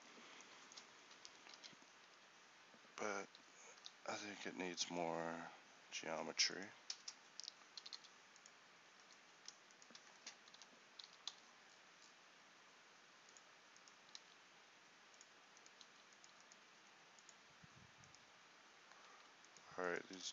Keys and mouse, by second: 1.2 z, 1.6 a, 2.1 z, 3.8 k, 7.6 middle click, 7.8 g, 10.6 o, 11.1 g, 14.2 s, 16.0 s.